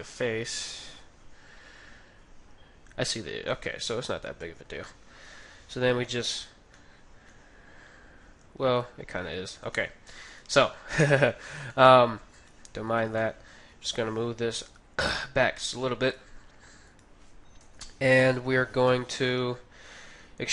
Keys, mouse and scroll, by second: 4.2-5.9 right drag, 4.8-9.0 middle drag, 5.2 KP_3, 9.3 ctrl+z, 9.9 ctrl+z, 10.4 ctrl+z, 10.6 ctrl+z, 11.1-17.2 middle drag, 12.3-14.5 right drag, 13.7 g, 16.0-18.7 right drag, 17.5 KP_3, 18.8 KP_1.